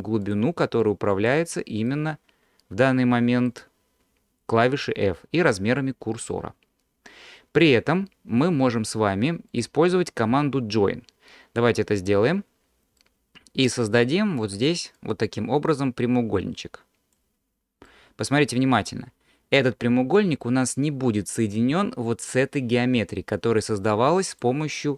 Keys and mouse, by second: 0.8 click, 1.9-3.5 middle drag, 9.6-12.2 drag, 13.0-14.0 middle drag, 14.0 alt+click, 15.0-17.2 drag, 17.9 middle click, 20.5 middle click, 24.3-24.9 drag.